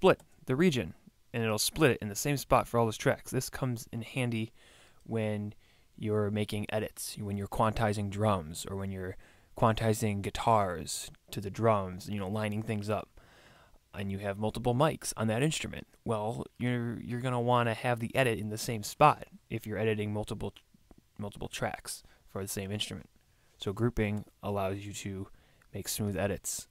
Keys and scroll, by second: 0.2 super+e, 24.1 super+e.